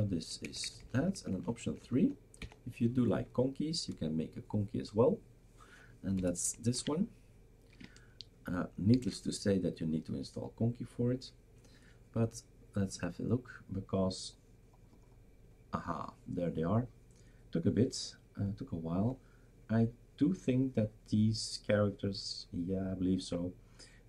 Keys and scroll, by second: 0.4 Down, 0.6 Down, 0.8 Down, 0.9 Down, 1.1 Down, 1.3 Down, 1.5 Down, 1.6 Down, 1.8 Down, 1.8 typing, 2.0 Down, 2.4 Down, 3.1-3.6 typing, 6.2 BackSpace, 6.7 ctrl+s, 9.0 shift+super+r.